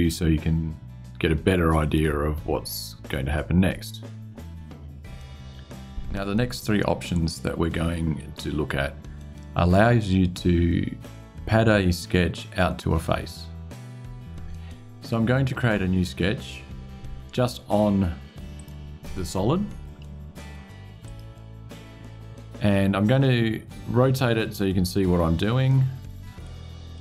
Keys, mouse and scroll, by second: 1.5 click, 18.3 click, 20.8 click, 23.9-26.4 middle drag, 26.7-27.0 middle drag.